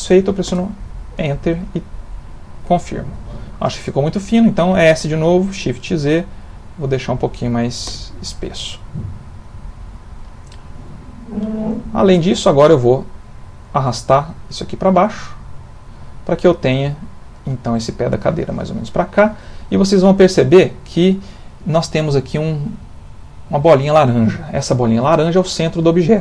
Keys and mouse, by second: 1.1 middle click, 2.2 middle click, 2.3 middle click, 3.3 middle click, 5.0 s, 8.4 middle click, 12.7 click, 16.0 middle click, 19.8 ctrl+middle click, 24.5 ctrl+middle click.